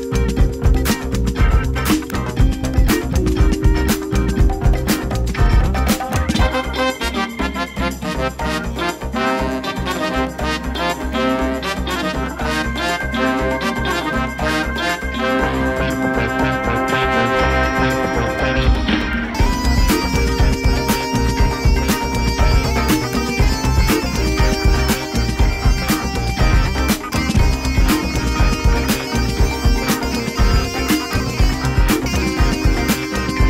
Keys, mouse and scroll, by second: 1.2 click, 2.4-3.8 drag, 4.0 click, 4.6-6.6 middle drag, 7.0 Tab, 7.7 click, 8.6 shift+click, 10.1 shift+drag, 10.9 g, 13.6 click, 14.0 middle click, 14.8 shift+middle click, 15.0 shift+click, 15.1-15.9 typing, 18.2 click, 18.7-19.3 drag, 19.5 Tab, 20.1 click, 22.5-23.0 drag, 23.9-24.5 drag, 25.2 click, 25.8-27.0 drag, 29.7-30.9 drag.